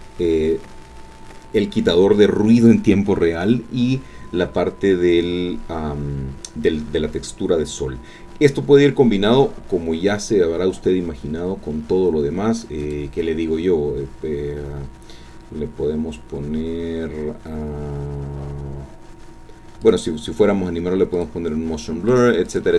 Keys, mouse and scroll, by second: 9.0-9.3 scroll up 2, 9.5-9.9 scroll down 2, 9.9-10.4 scroll up 1, 12.8 click, 16.6-17.1 scroll down 1, 19.8 click, 21.1 click, 22.1 click, 22.5 click.